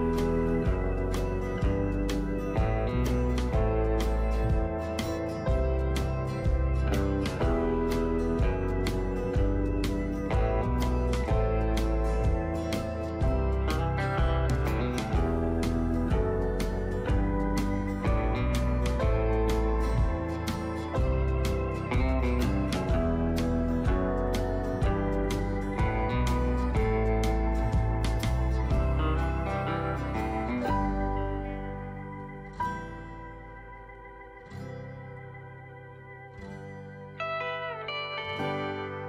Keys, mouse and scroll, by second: 3.1 right click, 5.6-9.1 drag, 9.1 Down, 9.6 Down, 9.7 Down, 12.3 Down, 17.5-21.6 drag, 25.9-39.0 alt+shift+drag.